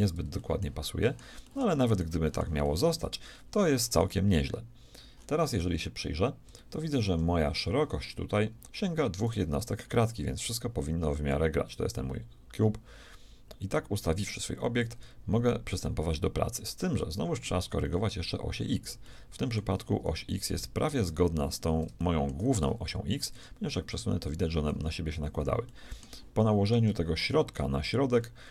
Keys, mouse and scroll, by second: 0.4-9.3 shift+middle drag, 9.3-10.9 right drag, 11.2-13.1 drag, 17.1-18.2 middle drag, 21.1 right click, 23.4 g, 25.7-28.4 shift+middle drag.